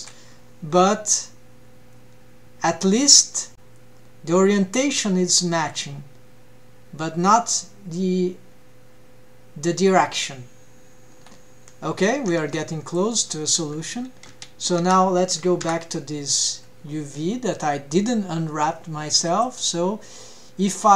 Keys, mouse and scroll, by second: 12.4 ctrl+Tab, 12.9 click, 13.5 Tab, 14.3 a, 15.6 l, 19.3-20.9 drag.